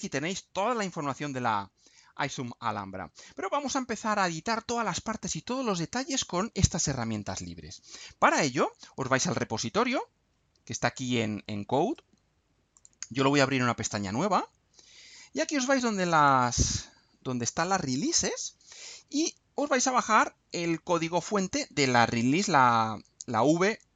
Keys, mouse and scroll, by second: 0.5-1.1 scroll down 2, 1.8-2.2 scroll down 2, 4.5-4.9 scroll up 2, 5.7-6.1 scroll up 2, 7.1-7.6 scroll up 2, 7.6-8.3 scroll up 1, 8.4-8.7 scroll up 2, 11.8 right click, 12.7 click, 14.1 click, 16.3 click, 18.8-19.2 scroll down 2.